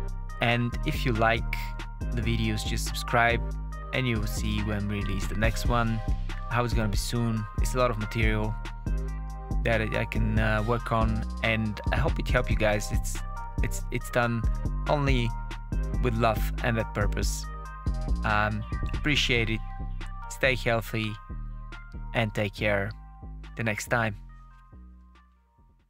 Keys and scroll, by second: 0.6 space, 3.6 Tab, 4.4 space.